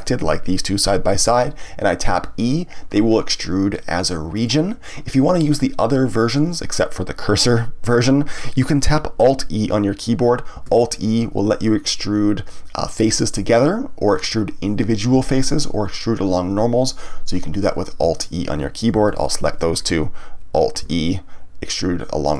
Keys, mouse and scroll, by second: 2.1 e, 4.4 click, 10.5 alt+e, 17.5 click, 18.1 shift+click, 19.0 shift+click, 20.8 alt+e.